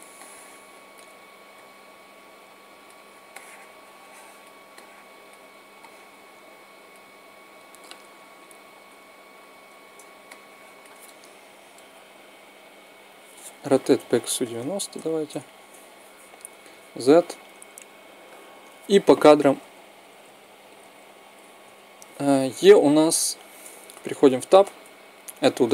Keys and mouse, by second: 1.3 click, 2.0 click, 5.5 middle click, 6.4 click, 8.6 KP_1, 13.4 r, 16.4 z, 19.0 Right, 23.6 Tab, 24.2 click.